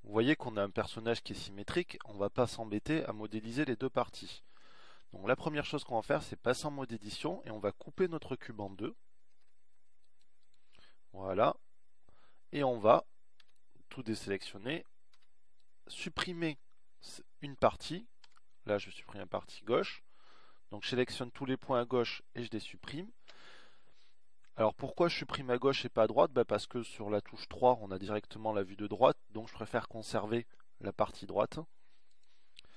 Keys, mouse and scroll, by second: 5.0 Tab, 5.8 Tab, 7.3 Tab, 10.2 ctrl+r, 14.3 a, 16.1 b, 19.2 Delete.